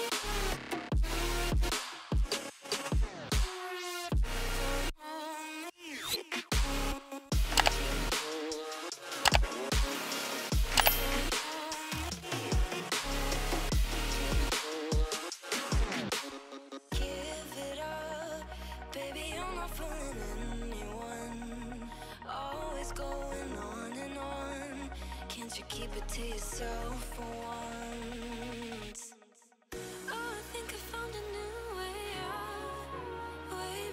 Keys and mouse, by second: 0.4 alt+click, 1.5 click, 2.3 Down, 5.0 Down, 6.7 Up, 7.8 click, 8.9 click, 9.9 click, 12.7 click, 14.4 click, 16.5 click, 17.1 click, 21.1 click, 25.2 click, 27.2 click, 29.1 click, 32.9 click.